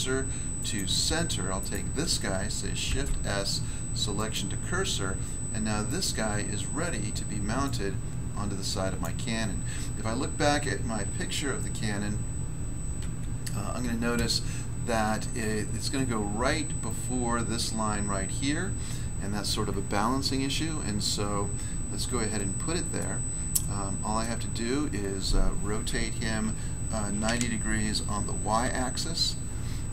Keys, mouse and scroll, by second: 1.5 right click, 1.6 right click, 2.8 s, 4.1 click, 4.3 click, 5.8 right click, 6.0 right click, 7.6 click, 8.9 click, 11.0 1, 12.9 1, 22.3 middle click, 22.9 middle click, 23.5 middle click, 26.4-27.3 typing, 28.6 y.